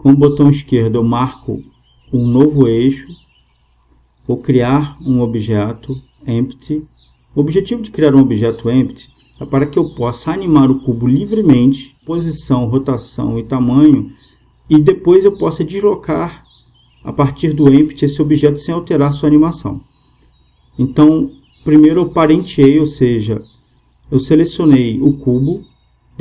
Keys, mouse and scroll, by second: 0.1-1.7 middle drag, 1.7-3.6 drag, 9.2 space, 15.4 space, 19.8-22.6 middle drag, 22.6-24.4 right drag.